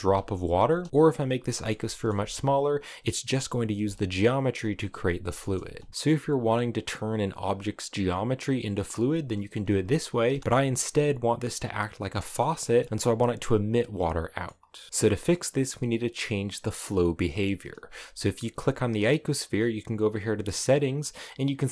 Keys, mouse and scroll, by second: 0.3 space, 0.5 s, 0.9 click, 1.3 middle click, 1.9 space, 2.3-3.4 drag, 3.4 space, 4.2-5.3 middle drag, 5.3 space, 5.7 middle click, 5.9-9.9 drag, 9.9 space, 10.3 middle click, 10.3-11.8 scroll up 2, 12.0-14.4 middle drag, 14.4 scroll up 1, 14.6 shift+middle click, 15.2-16.3 scroll down 1, 18.0 g.